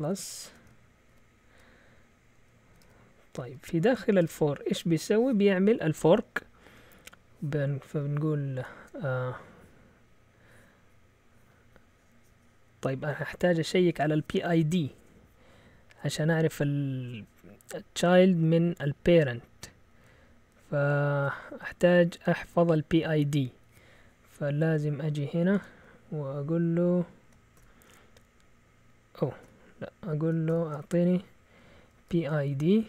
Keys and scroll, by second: 0.0-1.6 typing, 2.7 Return, 2.8 Return, 3.4 Up, 4.2 Tab, 8.8 BackSpace, 25.5 Escape, 27.6 shift+p, 29.2-32.8 typing.